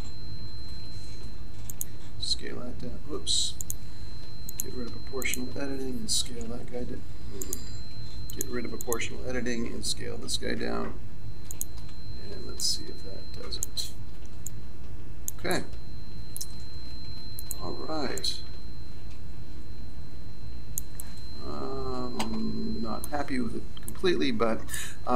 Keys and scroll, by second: 6.4 s, 10.6 s.